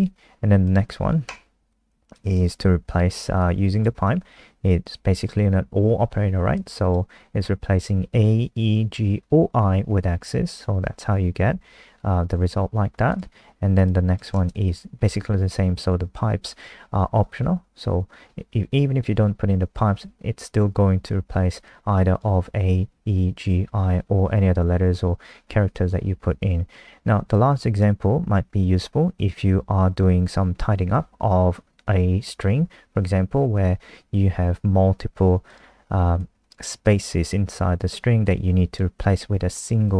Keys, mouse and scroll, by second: 3.4 click, 14.3 click, 21.6 click, 36.7 click.